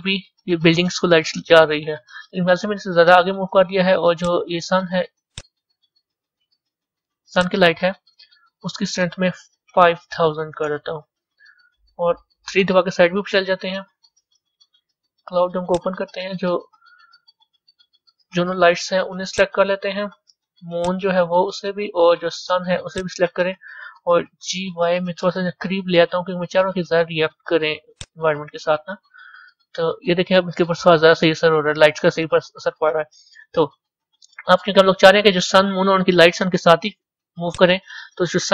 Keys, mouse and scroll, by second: 1.3-2.3 scroll down 4, 2.3 scroll down 1, 4.2 click, 5.4 click, 5.9-7.3 middle drag, 7.3 click, 10.6 KP_0, 12.5 KP_3, 19.3 ctrl+click, 24.4 g, 28.3-29.6 middle drag, 29.6-30.1 scroll up 4, 30.1 scroll down 1, 30.8-32.2 scroll up 2, 32.2-33.0 middle drag, 33.0-33.7 scroll down 6, 34.5-37.6 middle drag, 37.6 click.